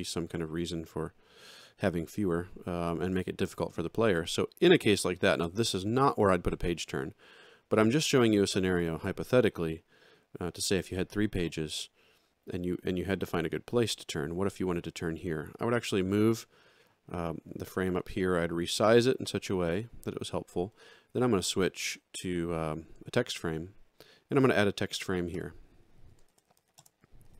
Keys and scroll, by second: 25.3 Return, 26.4-27.3 typing.